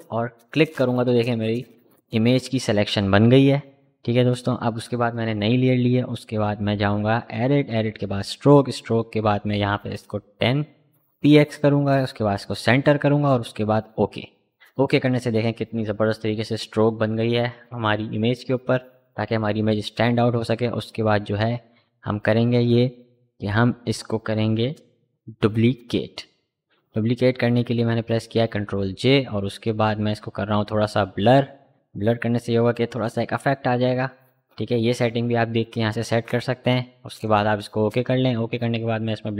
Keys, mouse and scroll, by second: 7.7 click, 10.4-13.1 drag, 14.0 click, 17.0 ctrl+d, 25.1 ctrl+d, 26.5 ctrl+j, 28.1 click, 31.2 click, 33.7 click, 37.4 click.